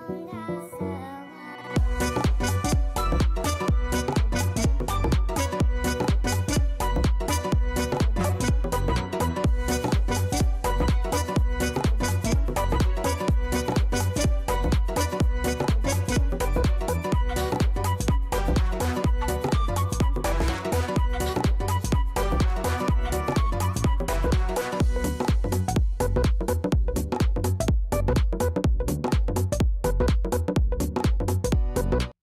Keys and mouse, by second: 3.1 click, 4.0 alt+right click, 4.7 alt+click, 5.2-8.2 alt+drag, 8.3 alt+right click, 8.5 alt+middle click, 8.6-9.7 alt+drag, 9.8 alt+middle click, 10.0 alt+right click, 10.1 alt+click, 12.2 click, 13.2 click, 14.4-17.3 right drag, 17.3 click, 18.2-20.3 alt+drag, 24.5 click, 29.0 click.